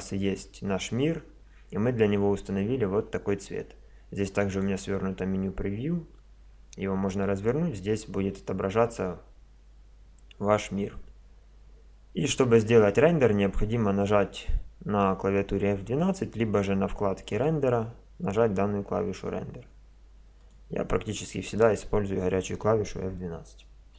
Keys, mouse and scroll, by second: 4.5-19.0 drag, 19.1 click, 20.4-22.3 drag.